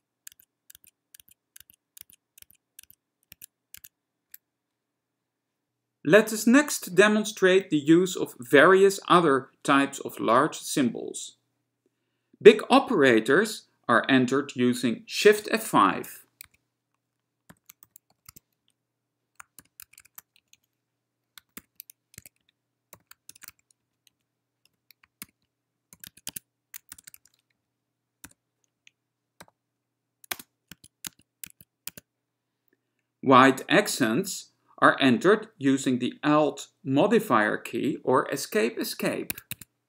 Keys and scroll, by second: 0.0 ctrl+Tab, 0.5 ctrl+Tab, 0.9 ctrl+Tab, 1.3 ctrl+Tab, 1.8 ctrl+Tab, 2.2 ctrl+Tab, 2.6 ctrl+Tab, 3.0 ctrl+Tab, 3.5 ctrl+Tab, 3.9 ctrl+Tab, 16.2 shift+F5, 16.7-20.2 typing, 20.6 Right, 20.7 Right, 21.7-28.5 typing, 22.5 Down, 24.2 Right, 26.2 Tab, 26.4 Tab, 28.9 Right, 29.6 ,, 30.4 space, 30.8 Tab, 31.2 Tab, 31.6 Tab, 32.0 Tab, 39.7 ⎋.